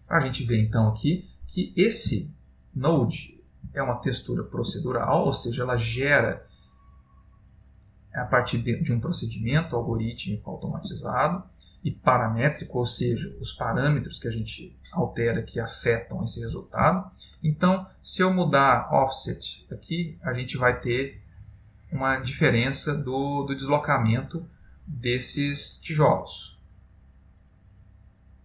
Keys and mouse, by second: 2.4 ctrl+middle click, 3.4 middle click, 3.9 ctrl+middle click, 5.1 middle click, 10.3 ctrl+middle click, 17.1 ctrl+middle click, 18.7 click, 24.9 click.